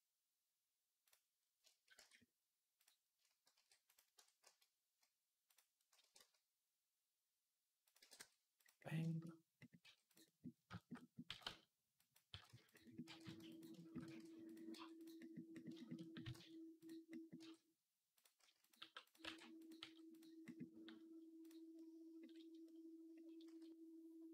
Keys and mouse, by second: 0.8 click, 0.9-2.6 middle drag, 1.8 Tab, 2.6 click, 2.7-5.2 shift+middle drag, 3.3 shift+d, 3.9 Tab, 4.2 a, 5.2 click, 5.3 middle click, 5.8 r, 7.8 g, 8.8-21.2 shift+middle drag, 9.6 g, 11.0 g, 12.1 g, 12.8 r, 13.8 r, 14.5 g, 16.0 g, 17.2-19.6 typing, 21.2 click, 21.3-24.3 middle drag, 23.3 s.